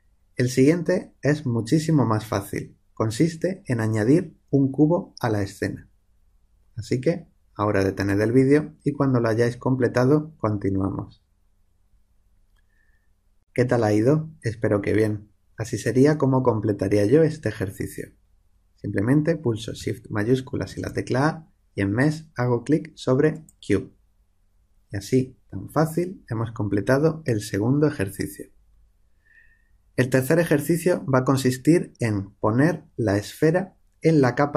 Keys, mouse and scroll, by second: 20.7 shift+a.